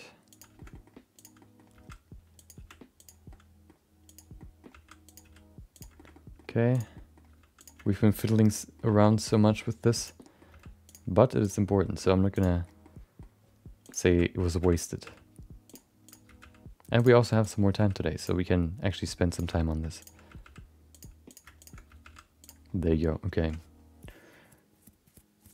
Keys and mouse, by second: 0.5 shift+middle click, 0.7 middle click, 1.1 click, 1.4 middle click, 1.7 g, 2.5 r, 3.3 middle click, 4.0 click, 4.3 middle click, 4.7 g, 5.2 r, 5.9 shift+middle click, 6.1 middle click, 6.7 click, 6.9 middle click, 7.2 g, 7.8 shift+middle click, 8.3 shift+middle click, 8.5 middle click, 8.9 shift+middle click, 9.0 middle click, 10.0 click, 10.2 middle click, 10.5 g, 11.4 click, 11.6 middle click, 11.9 g, 12.8 middle click, 13.8 click, 14.1 g, 16.0 click, 16.2 g, 17.4 click, 18.1 g, 18.4 middle click, 19.3 click, 20.0 shift+click, 20.2 g, 21.3 click, 21.6 shift+click, 21.8 g, 22.9 middle click, 23.6 Tab.